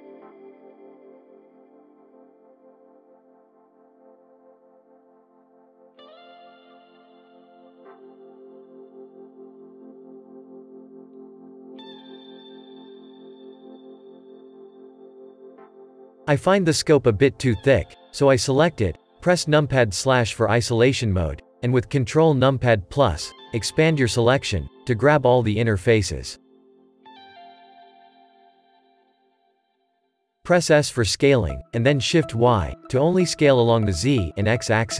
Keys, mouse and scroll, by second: 0.0-0.5 scroll up 3, 0.5 click, 0.6 click, 1.7 ctrl+KP_Add, 2.6 shift+click, 2.6 shift+click, 2.8-3.3 scroll up 1, 3.3 shift+click, 3.4 shift+click, 3.6 shift+middle click, 4.4 shift+click, 4.9 scroll down 4, 5.4-6.8 drag, 6.8 Tab, 7.0 scroll down 4, 7.2-7.7 shift+middle drag, 7.7-8.6 scroll up 10, 7.9 click, 8.0 Tab, 8.1 middle click, 8.3 middle click, 8.6 shift+middle click, 9.5 click, 9.5 click, 9.8 shift+click, 9.9 shift+click, 10.4 shift+click, 10.4-11.1 shift+click, 10.8 shift+click, 10.9 shift+click, 11.5 shift+click, 12.0 shift+click, 12.2-12.7 scroll down 3, 12.7 click, 13.1 Tab, 13.4-14.1 scroll down 15, 13.7 shift+middle drag, 14.1 middle drag, 14.3 click, 14.8 shift+middle click, 15.7 click, 15.8 middle drag, 16.1-16.5 scroll up 2, 16.5 click, 17.0 Tab, 17.3-17.9 scroll up 3, 17.9-20.7 middle drag, 20.7-21.1 scroll down 1, 21.5 KP_Divide, 22.4-22.8 scroll up 6, 22.8-24.0 middle drag, 24.0 click, 24.5 scroll down 1, 27.1 click, 28.0 middle click, 28.9 ctrl+KP_Add, 29.2 ctrl+KP_Add, 29.5 ctrl+KP_Add, 29.9 ctrl+KP_Add, 30.4 ctrl+KP_Add, 30.9-31.2 scroll down 1, 31.2 s.